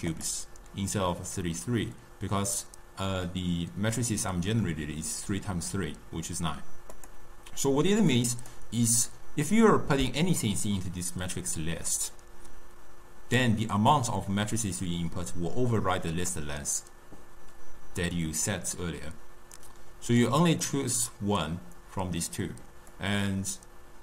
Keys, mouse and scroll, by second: 0.0 click, 6.9 click, 8.0 click, 19.5-20.6 drag, 22.8-24.0 drag.